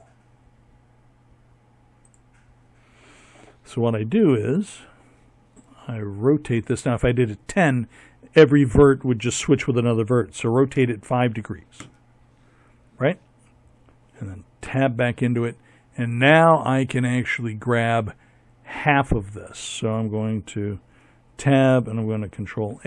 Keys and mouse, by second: 2.3 Tab, 4.0 r, 12.5 Tab, 18.8 Tab, 20.5 ctrl+a.